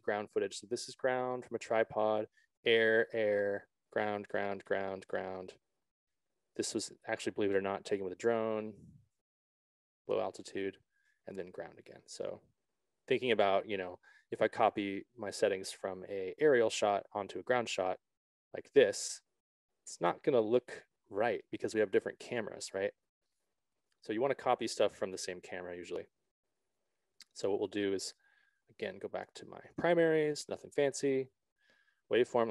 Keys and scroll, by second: 22.6 s, 22.8 ctrl+z.